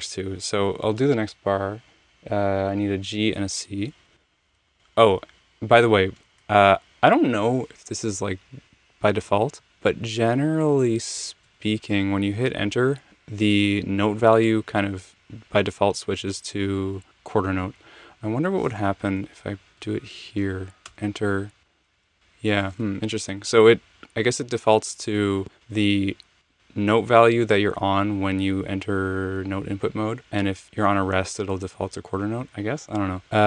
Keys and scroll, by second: 0.1 Return, 4.1 g, 4.5 super+z, 6.2 Left, 6.4 Right, 9.5 Right, 9.8 Left, 10.3 Left, 10.7 Right, 10.9 Right, 11.4 Left, 18.9 Return, 19.4 Left, 19.8 Left, 20.1 Right, 20.9 Return, 21.9 space.